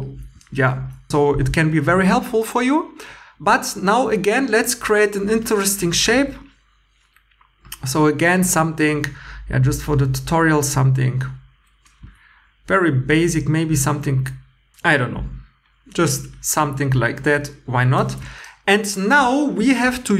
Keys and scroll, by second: 6.2 1, 12.0 x, 18.0 2, 19.7 2.